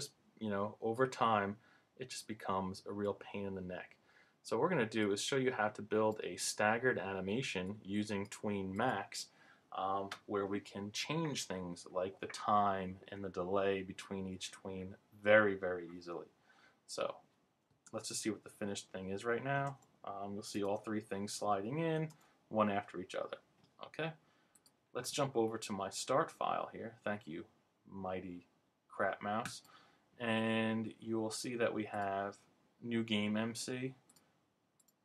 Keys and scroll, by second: 17.8 super+Return, 19.6 alt+Return, 20.6 super+Return.